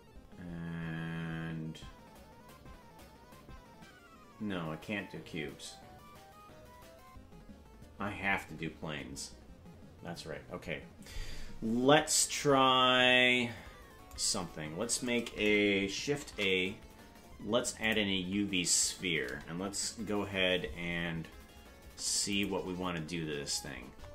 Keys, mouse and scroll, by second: 11.7 scroll down 3, 16.2 shift+a, 22.3 click, 23.7-24.1 scroll up 18.